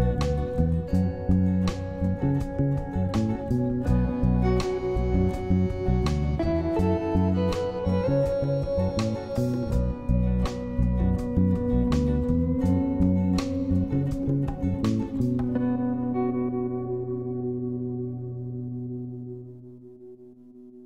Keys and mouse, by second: 1.2-2.5 drag, 3.2 shift+click, 3.4 shift+click, 4.3-6.0 shift+drag, 6.2 shift+click, 6.4-9.3 shift+drag, 9.8 shift+click, 10.2 shift+click, 10.7 shift+click, 13.4 click, 15.1 right click, 16.1 click, 17.2 middle click, 17.2 a, 18.1 middle click, 18.9 middle click, 20.2 click.